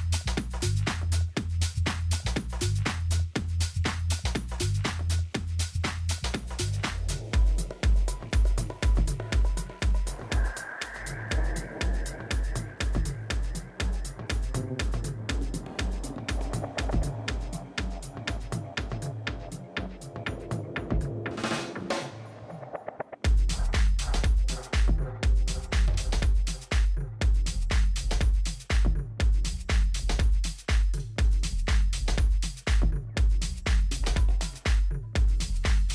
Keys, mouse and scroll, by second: 7.9-10.5 middle drag, 11.3 Tab, 11.7-14.3 middle drag, 12.4 a, 12.8 a, 14.4-16.0 right drag, 16.5-18.4 drag, 17.6 right click, 18.1-20.4 middle drag, 19.3 right click, 21.1-23.6 middle drag, 23.8 ctrl+b, 27.6-29.9 middle drag, 29.9 Tab, 31.5 ctrl+a, 33.4 middle click, 35.4 Tab.